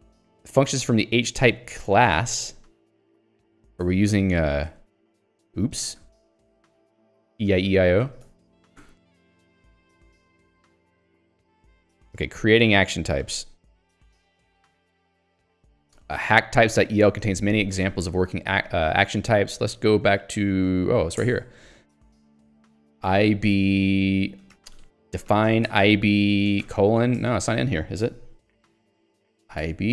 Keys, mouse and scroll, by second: 3.1 click, 3.8 Escape, 4.4 j, 6.9 k, 8.0 j, 8.8 k, 9.9 j, 11.5 ctrl+d, 13.4 middle click, 14.2 Escape, 14.5 j, 18.7 click, 19.1 Escape, 19.9 ctrl+alt+j, 20.4 ctrl+j, 21.4 Return, 22.8 ctrl+s, 22.9-23.8 typing, 24.7 ctrl+g, 24.9-26.6 typing, 27.3 ctrl+g, 27.5 Escape, 28.7 super+e, 29.3 ctrl+s, 29.3-29.9 typing.